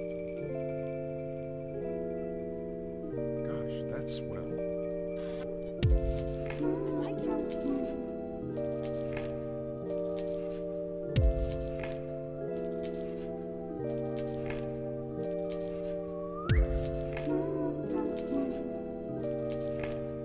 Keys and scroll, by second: 0.7 u, 3.5 u, 11.8 ctrl+s, 13.8 alt+x.